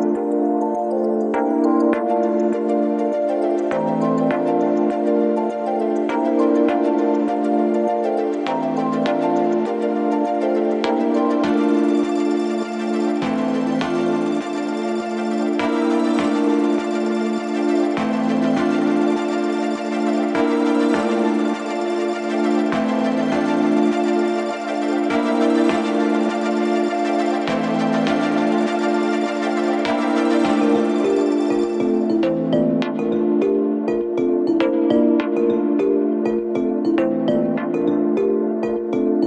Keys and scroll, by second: 4.3 shift+f, 7.6 ctrl+d, 7.7 Escape, 24.6 4, 30.7 3.